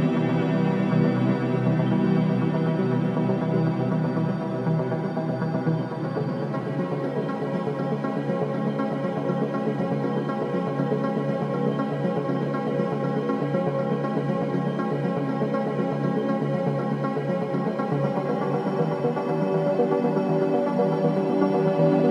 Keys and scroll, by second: 6.3 ctrl+d, 6.4 Escape, 9.3 4, 12.5 3, 14.8 m, 15.4 space, 15.5 b, 15.9 Return, 17.8 4.